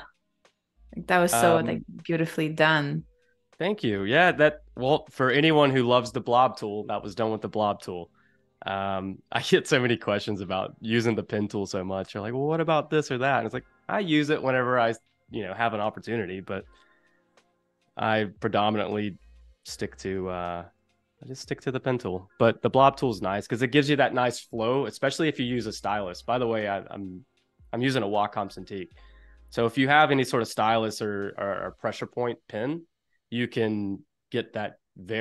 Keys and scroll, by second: 0.7 super+f, 17.8 space.